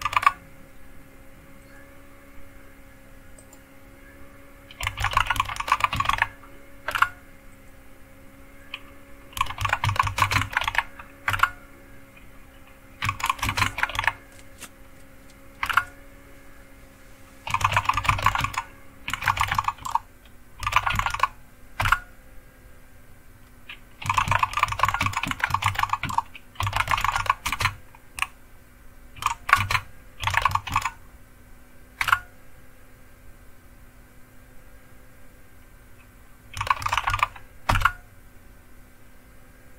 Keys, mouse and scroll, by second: 0.0 super+t, 3.4 click, 4.6-6.6 typing, 6.9 Return, 9.1-11.1 typing, 11.3 Return, 12.8-14.4 typing, 15.6 typing, 17.2-22.3 typing, 23.8-27.6 typing, 29.1-33.6 typing, 36.4-37.6 typing, 37.6 Return.